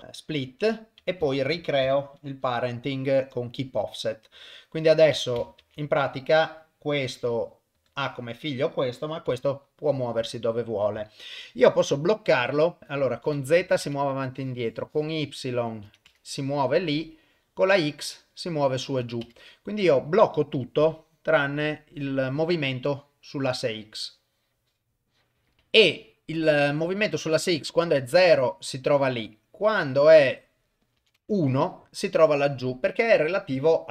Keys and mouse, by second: 1.3 shift+click, 2.4 ctrl+p, 5.6 ctrl+Tab, 6.1 click, 7.0 r, 8.3 click, 9.3 g, 12.8 click, 13.2 click, 14.3-15.5 drag, 15.7 click, 16.8-18.6 drag, 18.8 click, 20.3 click, 21.0 click, 22.9-25.3 drag, 28.1-30.6 drag, 30.8 click.